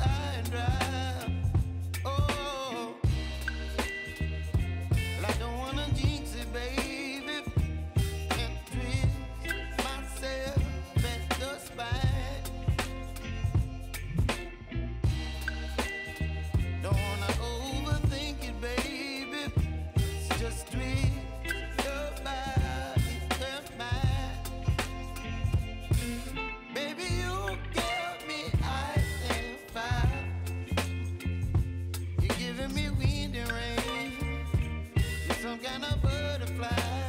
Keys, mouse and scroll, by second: 1.1 p, 3.0-4.6 drag, 5.4 u, 7.5 k, 9.6-13.1 drag, 13.1 scroll down 1, 14.0 click, 16.8 scroll down 1, 17.8-24.5 drag, 24.5 space, 27.2 space, 27.9 click, 31.1 space, 32.7 click, 33.3 ctrl+d, 36.9 s.